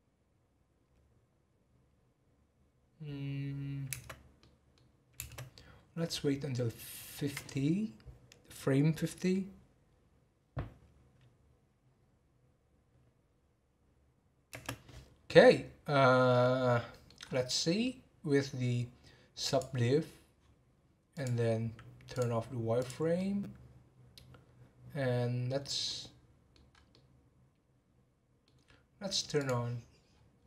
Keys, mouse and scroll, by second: 4.3-4.9 middle drag, 4.9-7.3 scroll up 2, 7.3-8.5 scroll up 1, 8.5-12.7 scroll up 1, 12.7-14.7 scroll up 1, 14.7-16.3 scroll up 1, 16.3-17.2 middle drag, 17.2 scroll up 1, 17.6 middle drag, 17.9 scroll down 1, 19.9 click, 21.1-22.8 drag, 23.1-26.7 middle drag, 26.7 scroll up 2, 26.9-29.6 middle drag, 29.6 click, 30.1 scroll down 4.